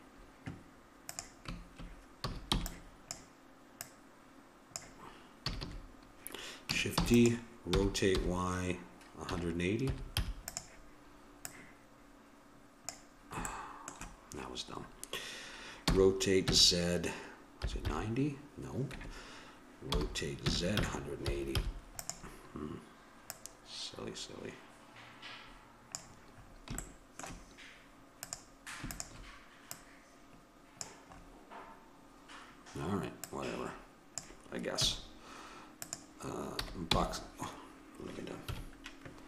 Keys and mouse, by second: 1.1-2.8 drag, 2.3 a, 2.5 b, 3.8-5.5 drag, 5.4 a, 5.7 a, 7.2 shift+d, 7.7 r, 11.5-13.2 drag, 13.5-15.9 middle drag, 15.9 r, 19.9 r, 23.3-25.0 drag, 26.5-28.2 middle drag, 28.2-31.5 drag, 31.7-33.3 middle drag, 33.3-35.1 drag, 34.9 a, 35.8-37.6 drag, 36.6 a, 36.9 q, 38.4 KP_1.